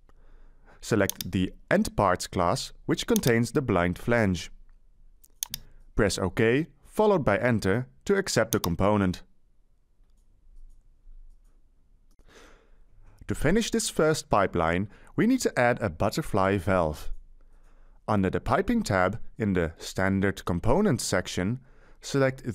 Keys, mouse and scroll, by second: 9.9 Return, 14.4 middle click, 17.8-19.2 middle drag, 19.8 Escape.